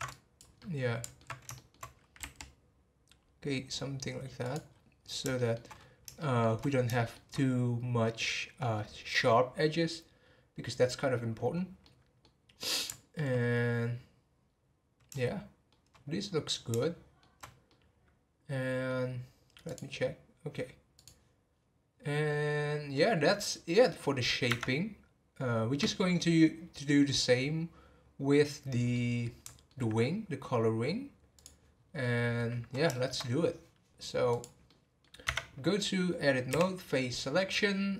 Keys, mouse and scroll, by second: 0.1 click, 0.6-2.2 middle drag, 2.2 r, 4.6-5.1 scroll down 5, 5.4 shift+middle click, 5.7-6.1 scroll up 3, 6.1 shift+middle click, 6.6-6.9 scroll up 1, 6.9-7.3 shift+middle drag, 7.3-10.5 scroll up 1, 11.8-12.4 middle drag, 12.4 scroll down 1, 12.6-13.7 middle drag, 13.7-14.1 scroll down 2, 14.5 scroll down 3, 15.1 shift+middle click, 16.1-16.7 scroll up 1, 16.7 shift+middle click, 17.4 scroll down 3, 17.7-20.9 middle drag, 22.9-24.5 middle drag, 24.5 Tab, 26.3 scroll down 1, 28.7 scroll down 3, 28.9-31.3 middle drag, 31.3 click, 31.7 scroll down 3, 32.0-34.3 middle drag, 34.3 click, 34.6-35.2 middle drag, 35.2 Tab.